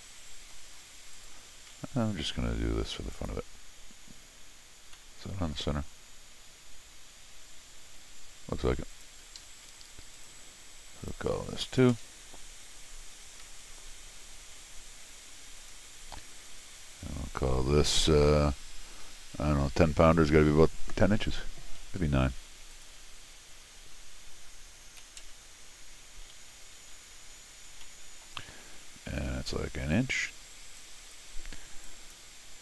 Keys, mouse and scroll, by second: 1.1 click, 1.7 c, 3.1 click, 4.9 middle click, 8.9 click, 9.2 Escape, 9.4 Escape, 9.6 d, 10.1 click, 11.0 click, 13.5 c, 15.6 click, 16.8 scroll up 1, 18.9 click, 22.0 Escape, 22.7 click, 26.4 x, 27.8 middle click, 30.8 click, 31.8 click.